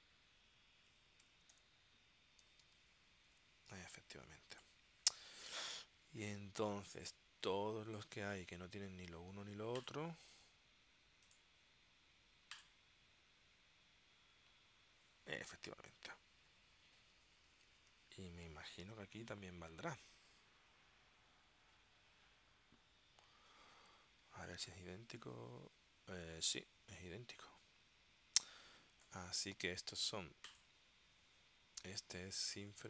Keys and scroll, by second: 1.1-3.3 typing, 3.4 Tab, 17.7 super+s.